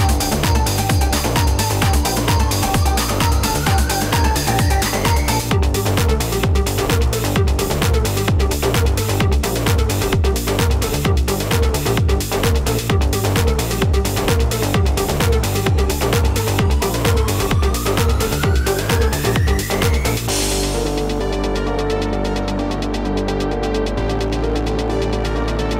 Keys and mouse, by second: 0.3 z, 1.5-5.0 typing, 1.6 click, 2.5 click, 3.4 click, 3.8 click, 4.1 click, 4.9 click, 6.0 z, 9.1 z, 9.9 =, 10.2 space, 10.3 click, 10.9 z, 12.6 z, 15.0 z, 17.0 space, 20.2-24.3 typing, 20.3 click, 21.5 click, 22.3 click, 24.1 click.